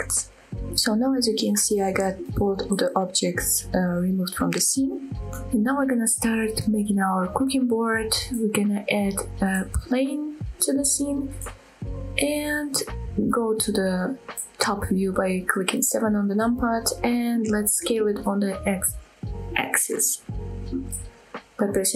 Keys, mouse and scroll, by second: 0.2 click, 1.6 shift+middle click, 6.2 shift+middle click, 6.2 scroll up 2, 8.6 shift+a, 11.6-12.1 middle drag, 12.3-12.7 middle drag, 13.0 middle click, 14.0 KP_7, 16.3 scroll up 1, 16.7 shift+middle drag, 19.3 s, 20.6 x.